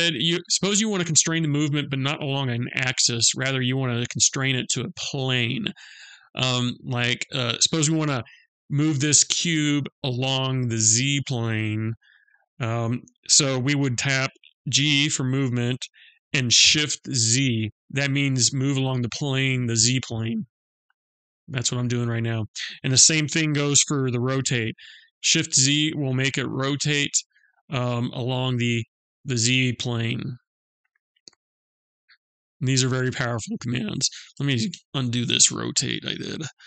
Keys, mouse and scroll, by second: 33.9 ctrl+z, 34.3 ctrl+z.